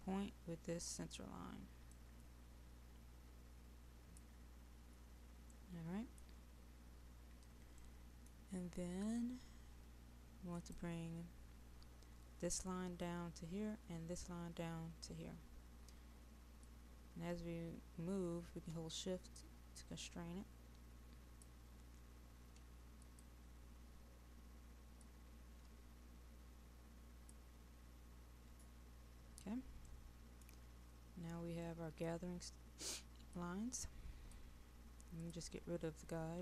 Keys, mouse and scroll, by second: 2.8-4.3 drag, 5.5 middle click, 6.8-7.3 scroll down 1, 7.3-7.8 scroll up 1, 7.8 middle click, 8.7-10.6 scroll down 1, 10.6-21.4 drag, 23.0-27.4 drag, 28.9-29.5 scroll up 1, 29.5-29.9 scroll down 1, 29.9 middle click, 30.9-31.7 scroll up 1, 31.7 middle click, 33.3-36.3 drag.